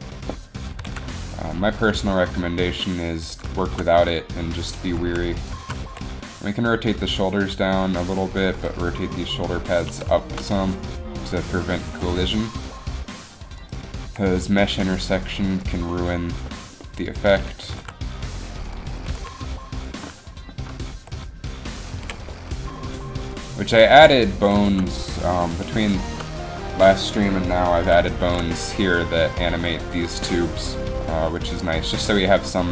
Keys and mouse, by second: 0.9 g, 5.1 z, 5.5 right click, 5.6 z, 6.0 r, 9.1 r, 12.0 r, 14.1 r, 14.3 r, 17.7 r, 19.1 r, 19.3 r, 21.1 r, 22.2 a, 23.8 r, 24.8 middle click, 28.9 r, 30.8 r.